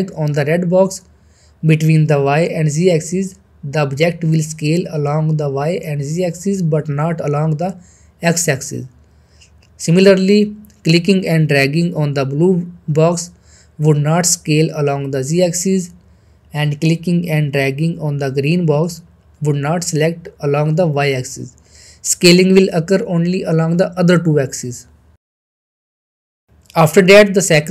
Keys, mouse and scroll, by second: 0.3-5.6 drag, 5.8-7.0 middle drag, 8.4 ctrl+z, 8.7-9.3 middle click, 9.4-10.2 scroll up 1, 10.2-13.3 drag, 13.4-15.0 middle drag, 15.2 ctrl+z, 15.8-16.1 middle drag, 17.1-19.7 drag, 18.7 middle click, 19.9 ctrl+z, 20.4 scroll down 2, 20.6 middle click, 21.4-22.7 shift+middle drag, 25.8 middle click, 26.0 click.